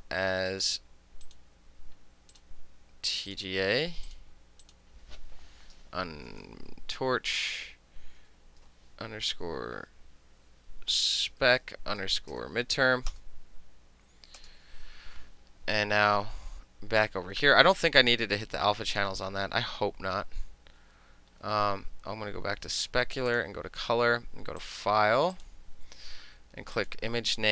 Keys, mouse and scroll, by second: 1.3 click, 2.4 click, 3.4 click, 4.1 click, 4.7 click, 7.1 Left, 7.6 Left, 8.3 Left, 10.8-12.4 typing, 13.2 Return, 14.5 Return, 17.8 click, 18.4 click, 19.0 click, 20.5 middle click, 20.8 middle click, 21.5 middle click, 21.8 middle click, 23.4 click, 24.7 click, 25.4 click, 26.8 click.